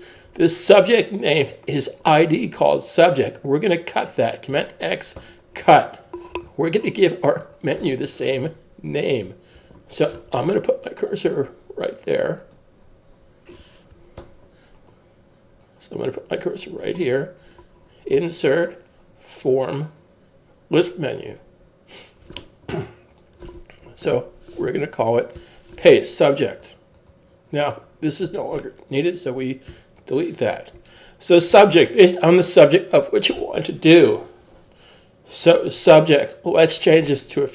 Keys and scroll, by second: 5.2 super+x, 14.2 super+z, 25.4 super+v, 31.5 super+s.